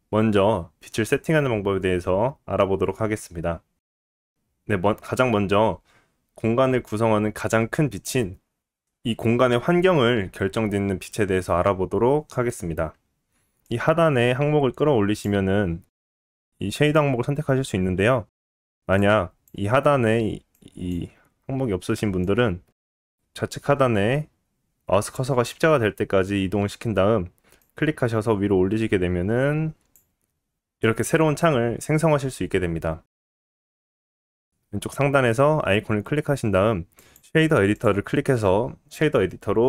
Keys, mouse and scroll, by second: 13.6-20.9 drag, 20.9-22.2 middle drag, 22.2-39.6 drag.